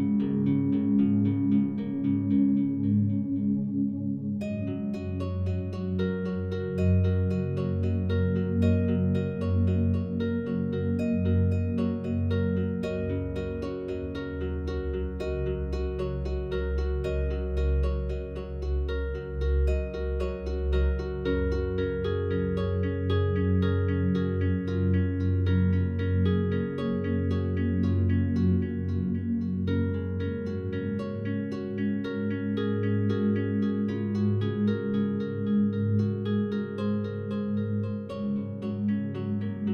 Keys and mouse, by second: 1.9 click, 2.1 ctrl+l, 2.9 ctrl+s, 4.3 click, 5.2 alt+shift+drag, 5.7 ctrl+alt+click, 6.1-8.8 alt+drag, 9.6 click, 10.5-11.0 alt+drag, 12.2 1, 12.8-13.5 ctrl+alt+drag, 14.3 click, 15.3-15.8 ctrl+alt+drag, 16.5-17.1 drag, 17.8 click, 18.4-19.5 shift+drag, 18.4 …, 18.4 1, 19.5-21.1 typing, 21.3 Return, 22.6 click, 22.6 typing, 23.2 click, 24.2 click, 24.4 click, 24.9 click, 25.5 click, 26.0-27.1 typing, 26.1 shift+click, 28.4-29.6 typing, 29.6 Return, 30.8 click, 31.0 click, 31.7-32.5 typing, 33.0-34.6 ctrl+alt+drag, 33.9-34.6 typing, 34.7-36.0 alt+shift+drag, 37.3 click, 38.3 click, 39.2 alt+shift+drag.